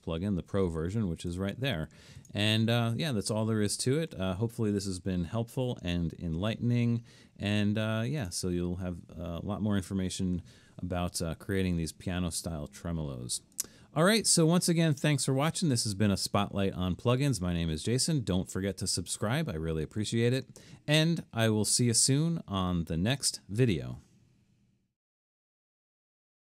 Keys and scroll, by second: 7.5 super+-, 21.8 typing.